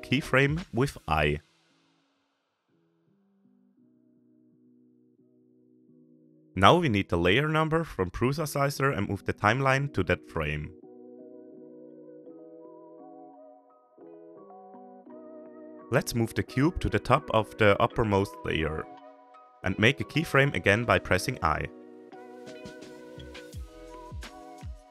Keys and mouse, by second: 0.1 click, 0.7 click, 2.6 shift+click, 4.6 i, 6.2-8.3 drag, 8.6-9.6 middle drag, 10.2-12.9 drag, 14.3-15.0 shift+middle drag, 15.3 g, 17.4 shift+middle click, 18.8-19.2 shift+middle drag, 19.9 shift+middle drag, 20.1 shift+drag, 20.7 g, 23.5 click, 23.9 shift+click, 24.0 shift+middle click, 24.1 shift+click.